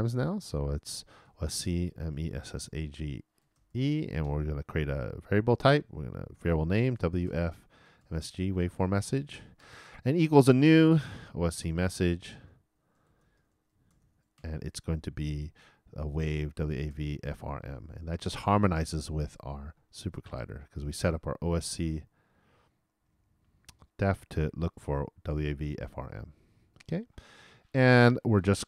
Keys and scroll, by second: 1.5-2.6 typing, 11.5-15.3 typing, 17.6-19.1 typing.